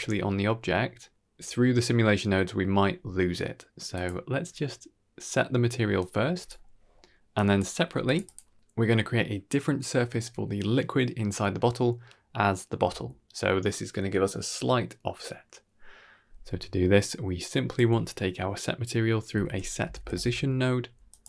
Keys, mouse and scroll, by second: 3.8 click, 5.9-6.4 drag, 6.7-7.1 scroll down 2, 6.8 middle click, 7.2 drag, 7.7 g, 8.1 click, 16.7 middle click, 17.4-21.1 drag.